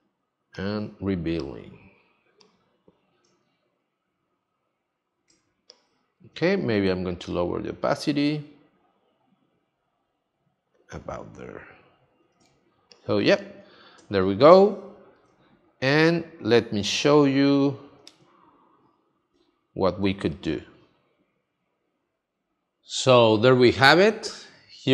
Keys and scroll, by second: 5.3 space, 12.4 space, 18.2 space.